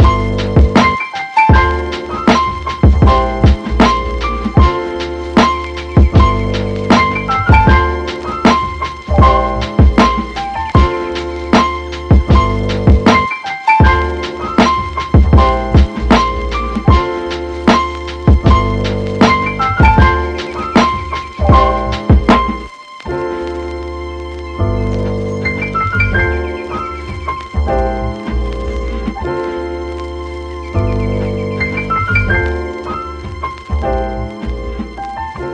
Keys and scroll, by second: 12.9 super+z.